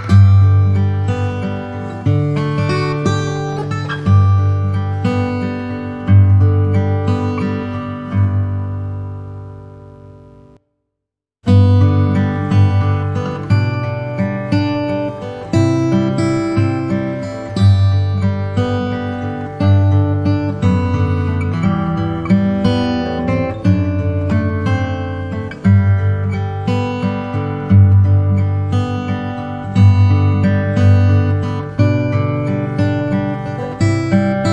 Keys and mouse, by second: 0.8 shift+r, 1.1 shift+r, 8.2 click, 13.3 shift+click, 16.3 ctrl+j, 19.3 KP_1, 24.7 ctrl+z, 27.5 click, 29.4 click, 34.1-34.5 shift+drag.